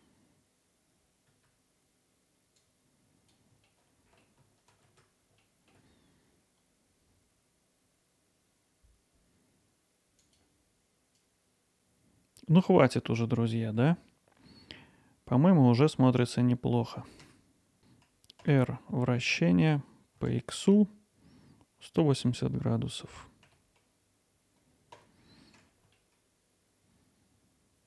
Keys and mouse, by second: 1.4 alt+middle click, 1.7 click, 2.1 alt+middle click, 2.2 click, 3.0 click, 3.3 click, 3.7 click, 4.2 click, 4.9 click, 5.2 click, 5.5 click, 5.9 click, 6.2 click, 6.4 click, 6.7 click, 6.9 middle click, 7.1 Tab, 7.2 Tab, 7.6 click, 7.7 click, 8.2-8.5 alt+middle drag, 9.2 Tab, 9.3-11.7 drag, 11.7 Tab, 14.5-16.2 alt+middle drag, 17.3 Tab, 18.4 r, 18.6 r, 18.9 r, 20.2 x, 22.2 1, 23.1 8, 23.5 0, 25.0 Return, 26.6-27.8 alt+middle drag.